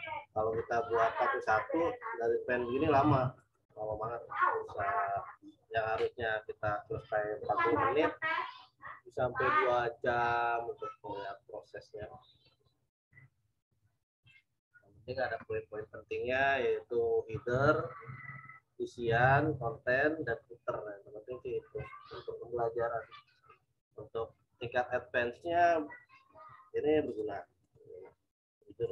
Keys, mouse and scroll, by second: 3.4 right click, 13.6 z, 14.2 alt+click, 27.0 click, 27.6 right click, 28.8 click.